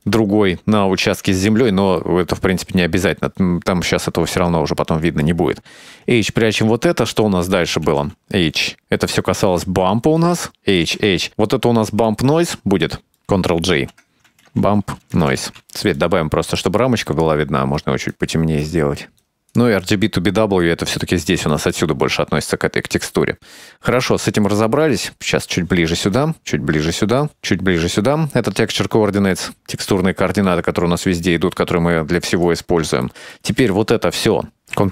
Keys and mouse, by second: 0.1-1.6 drag, 2.0 middle click, 3.5-5.4 drag, 6.0 h, 7.1-7.7 drag, 8.0 h, 8.3-9.2 drag, 9.5-10.0 drag, 10.0 h, 10.3 click, 10.9 click, 11.0 h, 11.1-12.1 drag, 12.7 middle click, 12.9 click, 12.9 shift+click, 13.0 click, 13.5 click, 13.7 click, 13.9 ctrl+j, 14.3-16.2 drag, 16.6 click, 17.0 click, 17.3 click, 17.6 click, 18.1 click, 18.3 click, 19.3 click, 19.5 click, 20.5 click, 21.0 click, 22.1-23.5 drag, 24.0-24.4 middle drag, 24.8 click, 25.9-27.1 drag, 27.7-32.3 drag, 32.6 middle click, 33.4 shift+middle drag.